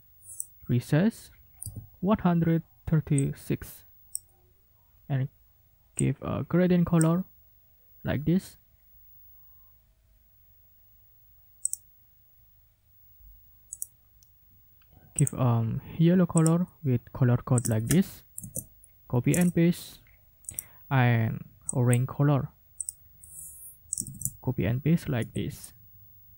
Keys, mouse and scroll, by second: 1.6 g, 3.2-4.3 drag, 6.0-7.2 drag, 11.7 middle click, 13.7 right click, 15.2 click, 16.4 click, 17.6 ctrl+click, 17.7 ctrl+a, 18.4 ctrl+v, 19.4 alt+Tab, 20.5 right click, 21.7 click, 22.8 click, 23.9 ctrl+click, 24.0 ctrl+a, 25.2 ctrl+v.